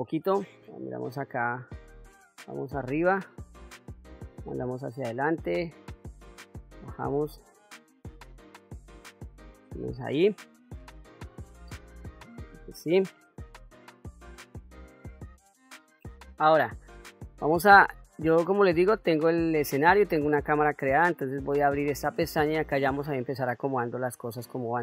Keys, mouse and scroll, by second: 0.6 KP_1, 2.2 KP_7, 3.8-5.1 drag, 5.5 KP_1, 7.0-11.2 drag, 17.9-21.1 drag, 23.0-24.8 drag.